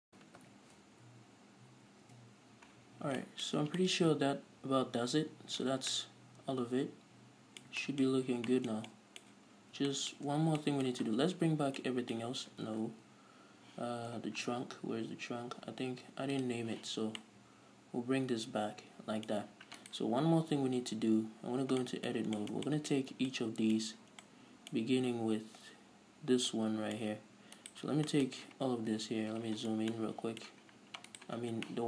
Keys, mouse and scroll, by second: 0.4 s, 2.4 Return, 2.7 a, 3.1-7.3 middle drag, 3.1 scroll down 2, 3.3 a, 3.8 scroll up 2, 4.1 Tab, 6.0 scroll down 2, 7.7-16.7 middle drag, 8.4-8.8 scroll up 2, 9.9 Tab, 10.8 Tab, 11.8 alt+h, 13.6 ctrl+z, 14.5-15.1 scroll down 2, 15.1-15.4 scroll up 2, 15.4-16.7 scroll down 2, 16.7 click, 17.5-20.1 middle drag, 20.1 right click, 21.3 Tab, 21.8-22.1 scroll up 1, 22.1-27.9 middle drag, 23.3-23.6 scroll up 1, 24.2-24.6 scroll up 1, 27.9 right click, 28.4-31.4 shift+middle drag, 29.2 KP_Decimal, 29.8-30.2 scroll down 1, 30.2 scroll up 1, 30.9-31.4 scroll down 1, 31.4 right click, 31.7-31.8 scroll down 1.